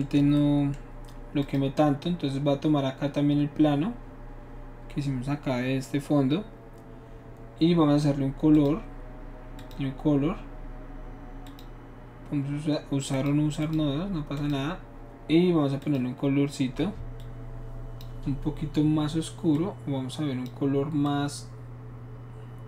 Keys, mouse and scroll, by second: 1.5 shift+click, 8.6 click, 9.6 click, 11.5 click, 13.2 click, 13.6 click, 14.4 click, 15.8 click, 17.2-18.0 drag, 19.5 click, 21.1-22.6 drag.